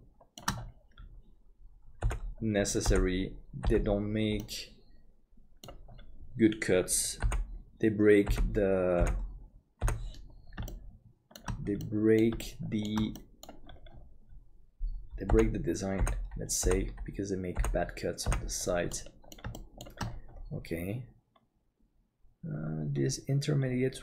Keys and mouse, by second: 2.0 click, 2.9 click, 4.5-5.7 drag, 7.2 click, 8.3 click, 10.7 shift+click, 11.8 middle click, 12.4 shift+middle click, 13.2 middle click, 15.3 click, 16.0 click, 18.9 middle click, 18.9 click, 19.6 shift+middle click.